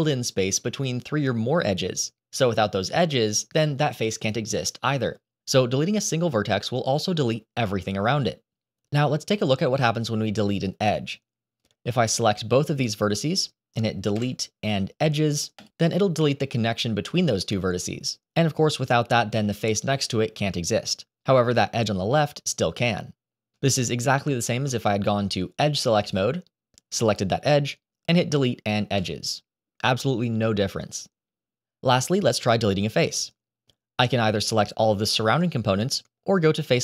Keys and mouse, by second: 11.7 click, 14.0 Delete, 24.4 ctrl+z, 26.0 click, 26.9 click, 27.8 Delete, 31.6 ctrl+z, 33.1-34.5 drag, 36.6 click.